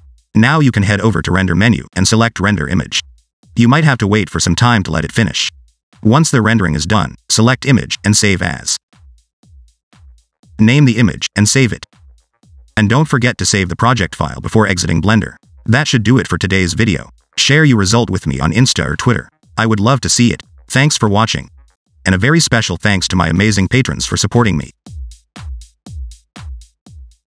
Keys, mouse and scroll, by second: 1.0 click, 15.7 click.